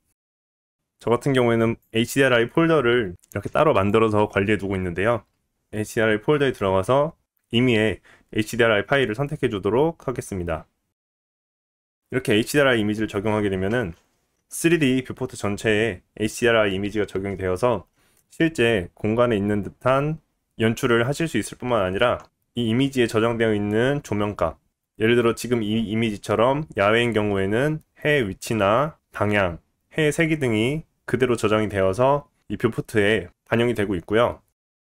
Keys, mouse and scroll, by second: 11.8-34.8 middle drag, 34.7 click.